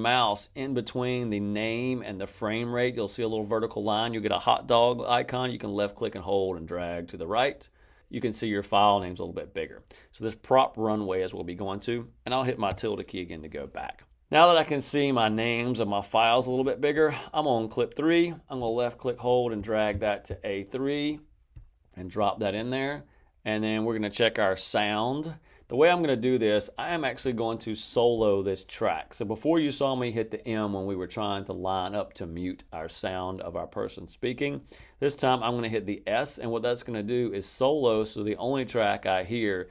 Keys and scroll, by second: 12.6 `.